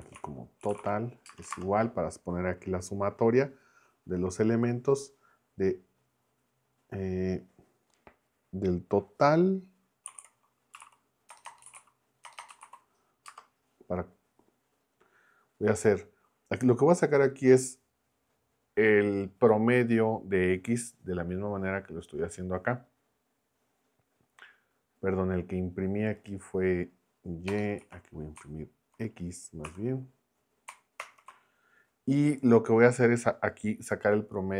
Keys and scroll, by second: 0.0-1.5 typing, 9.9-13.3 typing, 27.5 BackSpace, 27.8 x, 29.7 Escape, 31.0 ctrl+Return.